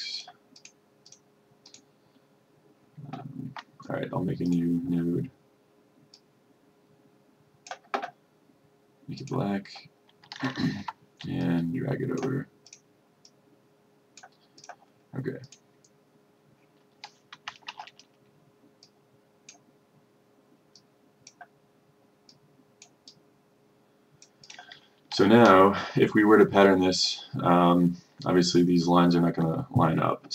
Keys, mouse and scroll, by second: 10.9 F1, 11.5-14.5 drag, 17.8 shift+5, 18.9-24.5 drag.